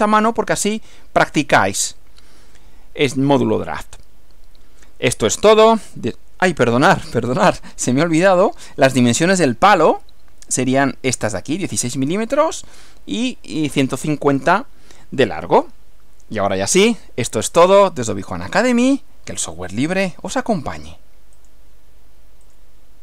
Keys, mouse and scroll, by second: 7.8 Right, 21.4 click, 22.5 click.